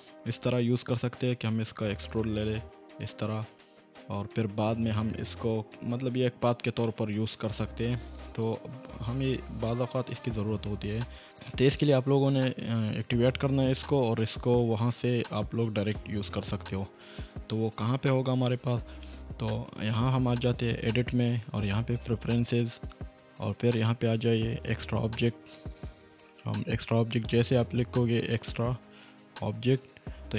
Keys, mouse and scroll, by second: 0.3 e, 1.9 ctrl+click, 2.9 ctrl+right click, 5.4 Tab, 6.8 middle click, 8.0 click, 13.7-14.7 middle drag, 15.1-15.9 scroll down 1, 15.9-16.5 middle drag, 20.4-21.0 drag, 25.4-26.4 typing, 28.4 typing.